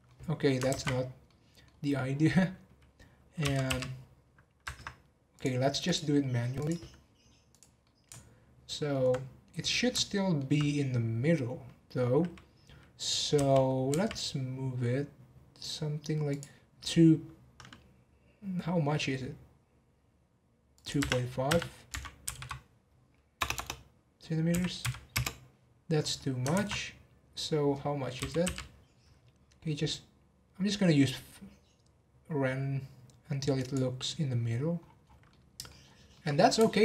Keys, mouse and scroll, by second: 0.7 ctrl+z, 1.2-1.8 middle drag, 1.8 scroll up 2, 3.4 g, 5.3-7.6 drag, 7.8-10.7 middle drag, 10.7-13.3 scroll up 1, 13.3 g, 20.7-22.3 drag, 22.3 m, 23.5 BackSpace, 26.5 ctrl+z, 28.1 g, 34.8 scroll down 1, 35.3-35.8 middle drag, 35.8 scroll up 3, 36.1-36.8 middle drag.